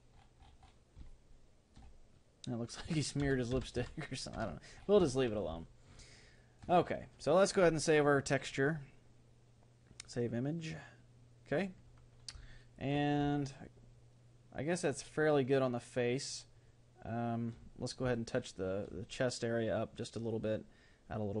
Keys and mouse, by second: 1.1-3.3 middle drag, 3.3 ctrl+z, 3.5 ctrl+z, 3.8 ctrl+z, 5.1-7.9 middle drag, 7.9-11.1 drag, 12.5-16.9 middle drag, 18.1-20.3 middle drag.